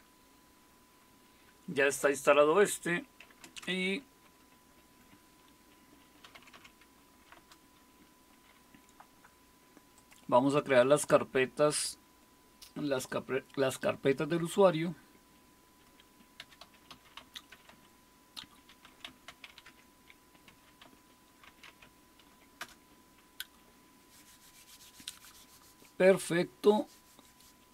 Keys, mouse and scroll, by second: 3.4 super+space, 6.0-7.5 typing, 7.3 Return, 10.0-12.6 drag, 10.0 typing, 16.4-22.2 typing, 22.6 Return.